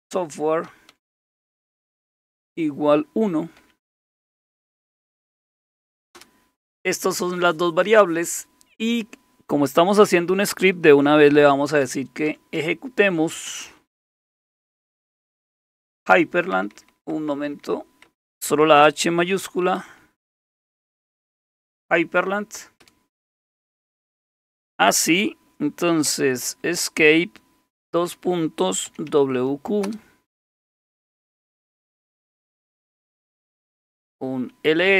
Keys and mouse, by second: 0.0-2.3 typing, 3.6 typing, 5.9-6.6 typing, 11.3-19.6 typing, 20.7-23.3 typing, 26.3 Escape, 26.7 Escape, 27.9-29.6 typing, 29.9 Return, 33.3-34.9 typing.